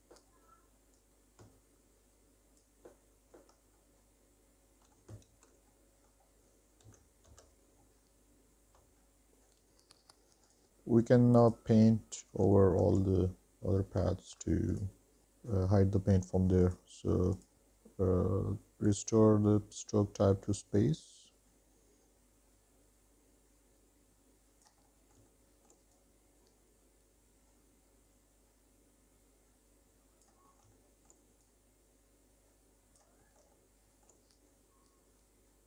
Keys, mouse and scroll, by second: 1.0-1.5 scroll down 1, 1.6 alt+click, 2.3 alt+click, 3.0 middle click, 3.8 middle click, 4.3 shift+middle click, 4.7 alt+middle click, 5.0 shift+middle click, 5.8 alt+click, 6.4 middle click, 6.8 alt+middle click, 7.0 alt+middle click, 7.4 shift+middle click, 8.0 alt+click, 8.8 middle click, 9.0 shift+middle click, 9.2 scroll down 1, 9.3 middle click, 10.7 middle click, 10.7 click, 11.6 click, 12.8 shift+s, 14.9 click, 16.8-20.3 drag, 21.2-22.8 drag, 22.9 middle click, 23.1 shift+middle click, 23.3-24.8 drag, 24.8 shift+middle click, 25.1 click, 25.7 middle click, 25.8 shift+middle click, 26.1-27.1 drag, 27.2 middle click, 27.5 click, 27.8 middle click, 28.2 click, 28.6 middle click, 29.1 middle click, 29.3 shift+middle click, 29.6 shift+middle click, 29.8 middle click, 30.0 middle click, 30.2 shift+middle click, 30.4 shift+middle click, 30.7 scroll up 2, 30.8 middle click, 31.0 scroll down 1, 31.0 alt+middle click, 31.0 alt+scroll up 1, 31.2 alt+scroll down 1, 31.4 shift+middle click, 31.9 click, 32.6 ctrl+z, 33.1 click, 33.8 click, 34.3 ctrl+z, 34.4 click, 34.7 shift+middle click, 35.0 middle click, 35.3 middle click, 35.4 middle click.